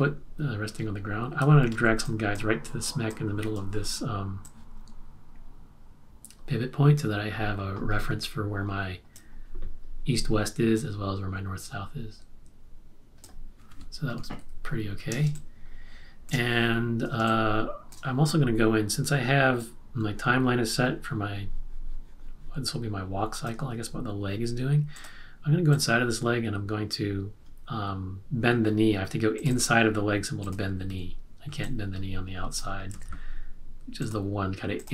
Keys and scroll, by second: 1.7 z, 14.4 super+-, 15.2 space, 17.3 space, 30.8 q, 32.9 super+z.